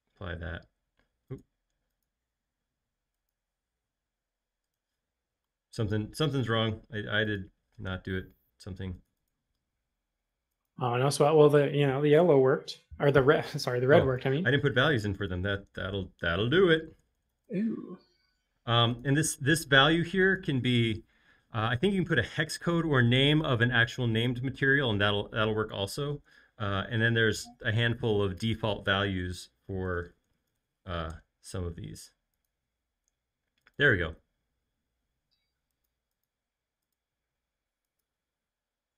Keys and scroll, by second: 16.3-18.0 typing, 29.6-31.1 typing, 31.1 shift+Return.